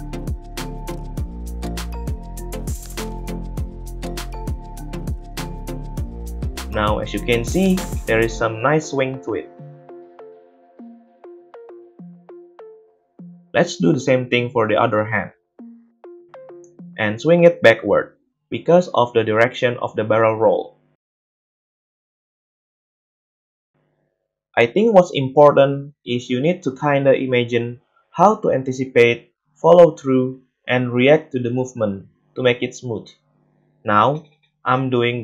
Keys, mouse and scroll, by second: 0.5-4.1 middle drag, 4.1 click, 4.7 space, 5.9-8.0 middle drag, 8.0-13.4 drag, 9.0 space, 11.9 space, 12.1 ctrl+v, 12.8 ctrl+c, 13.3 ctrl+v, 15.3-16.5 shift+middle drag, 16.6-16.9 shift+middle drag, 17.1-19.3 drag, 17.5 g, 19.3-22.0 middle drag, 22.0-31.0 drag, 22.8 middle click, 22.8 right click, 24.7 ctrl+c, 25.7 ctrl+v, 29.0 g, 31.0-32.1 middle drag, 32.1 right click, 32.3 click, 32.7-35.2 drag, 33.4 space.